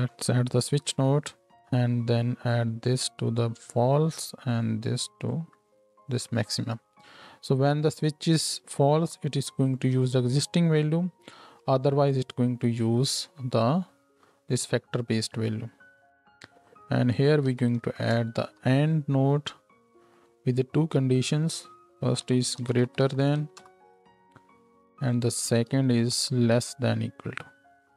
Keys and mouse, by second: 1.7-2.5 drag, 20.2-21.3 drag, 25.1 drag, 25.5 ctrl+click, 25.6 ctrl+shift+right click, 26.0 ctrl+shift+d, 26.3-27.8 drag.